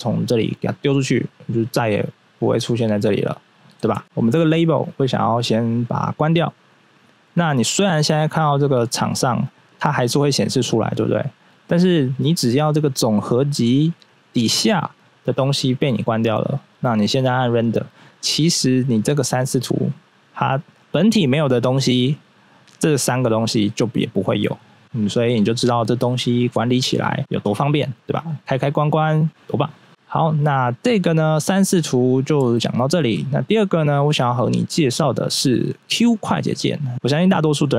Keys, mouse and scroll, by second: 0.6 click, 3.9 ctrl+z, 4.0 right click, 6.0 click, 9.7 right click, 10.4 right click, 16.8 click, 17.6 click, 29.9 click, 30.2 click, 32.5 shift+middle click.